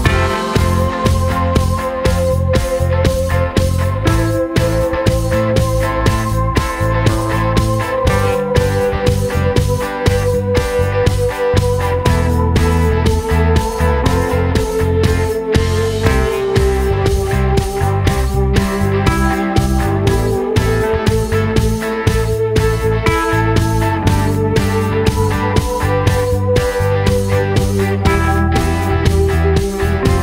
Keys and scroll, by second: 7.8 super+d.